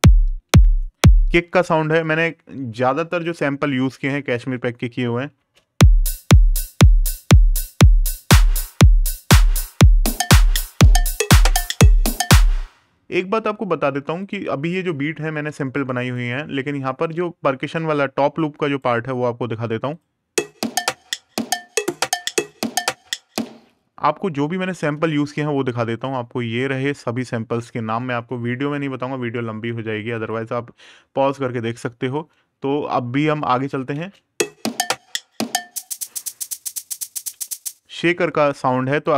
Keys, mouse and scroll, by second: 3.0 click, 5.1 space, 7.0 click, 11.8 space, 14.0 click, 15.8 click, 19.7 click, 24.5 super+KP_Add, 28.1 super+KP_Subtract, 29.9 click, 33.3 right click, 33.7 space, 35.1 click, 37.0 space, 38.1 click.